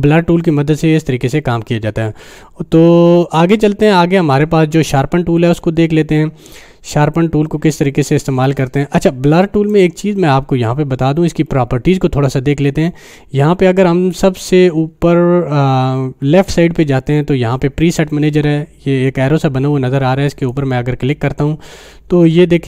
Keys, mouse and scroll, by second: 3.7-4.6 drag, 9.7 click, 20.3 click, 20.5 click.